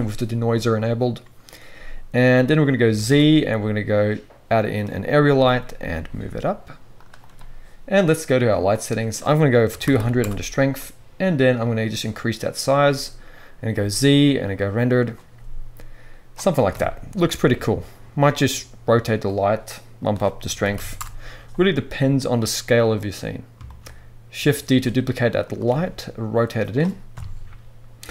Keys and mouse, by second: 2.9 shift+a, 5.3 g, 7.0-8.4 drag, 8.5 click, 9.9 0, 12.4-15.1 middle drag, 13.7 z, 16.7 KP_1, 17.4 g, 18.2-19.9 drag, 18.3 r, 20.6 3, 22.1-25.5 middle drag, 24.6 shift+d, 25.5 click, 25.7 r, 26.3-28.1 right drag, 27.1 KP_4.